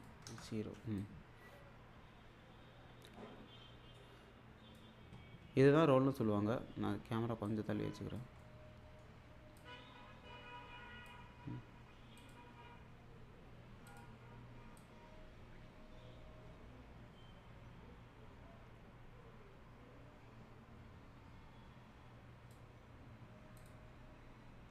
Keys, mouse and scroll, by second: 0.0-5.1 drag, 7.5-8.4 click, 8.4-9.0 middle click, 9.6-11.1 drag, 12.2 click.